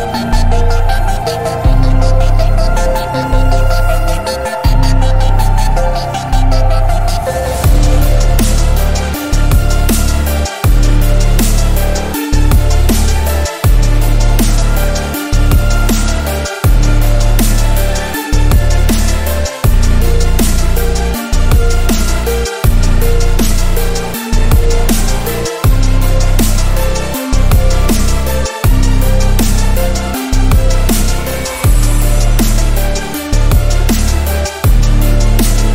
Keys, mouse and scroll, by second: 2.3-3.6 drag, 8.6-9.1 drag, 10.5 click, 11.8 click, 13.6 i, 14.8 ', 15.4 m, 17.7 click, 18.8 click, 21.6-23.7 typing, 24.3 click, 25.6 click, 26.3-27.9 typing, 29.0 click, 29.7-30.0 alt+scroll up 1, 30.5-31.9 drag, 35.4 ctrl+t.